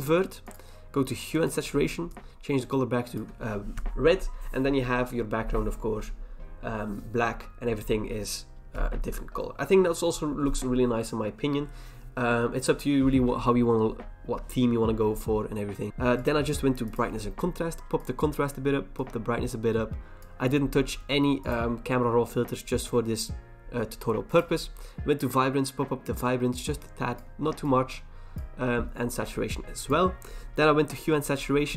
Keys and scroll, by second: 15.9 BackSpace.